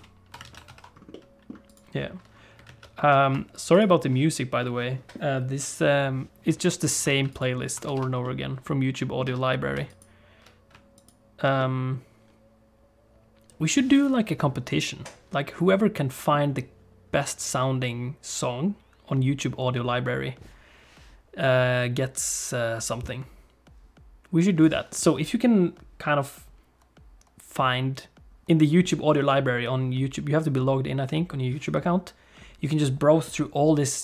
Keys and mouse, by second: 0.0 ctrl+space, 0.4 alt+a, 0.7 ctrl+s, 1.1 middle click, 1.6 click, 2.7 alt+a, 3.1 ctrl+s, 4.6 middle click, 7.1 alt+a, 7.3 click, 7.9 ctrl+s, 8.2 middle click, 9.3 Tab, 9.9 alt+click, 10.9 click, 11.6-16.3 middle drag.